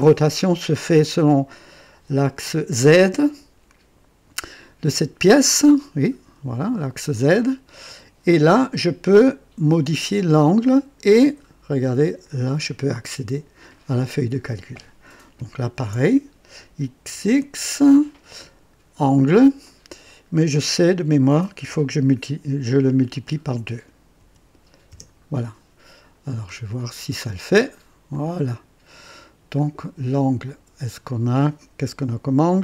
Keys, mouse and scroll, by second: 5.3 click, 7.1 click, 10.2 click, 12.2 click, 15.7 ctrl+v, 17.0 x, 17.2 x, 18.9 click, 21.5 KP_Multiply, 24.1 KP_2, 24.9 Return, 26.9 click, 28.1-29.5 drag, 29.6-31.1 drag, 31.1 typing, 32.5 click.